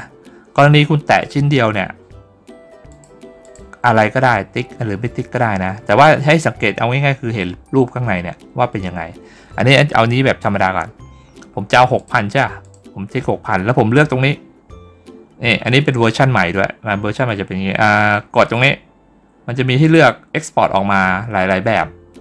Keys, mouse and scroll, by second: 2.7 click, 3.3 click, 11.8 click, 12.5 click, 19.7 click.